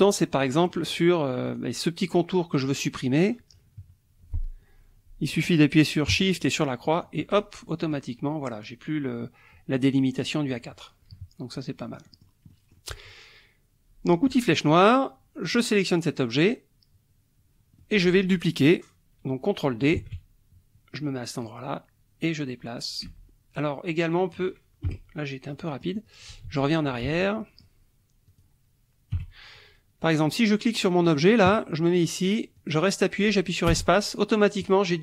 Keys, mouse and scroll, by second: 0.4 click, 0.8 middle click, 1.5 click, 3.8 KP_Subtract, 6.9 shift+click, 7.3 shift+click, 7.7 shift+middle click, 10.5 click, 11.2 KP_Subtract, 11.8 middle click, 12.1 click, 12.5 click, 14.3 click, 15.5 click, 17.8 click, 20.0 ctrl+d, 21.4-24.6 drag, 23.0 space, 24.8 Delete, 25.5 click, 26.5 ctrl+z, 27.4 ctrl+click, 28.3 click, 29.1 Delete, 31.1 click, 32.6-35.0 drag, 33.7 space.